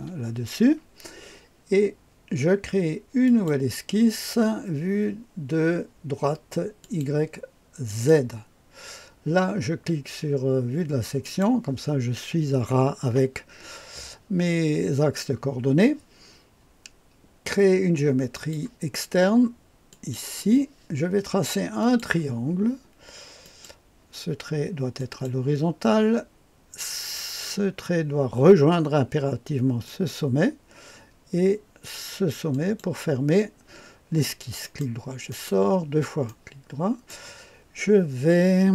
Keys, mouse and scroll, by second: 3.2 click, 6.8 click, 7.8 click, 11.2 click, 18.3 click, 19.9 click, 21.8 click, 23.4 click, 24.9 click, 29.8 click, 32.5 click, 34.6 right click, 35.3 right click, 36.2 right click.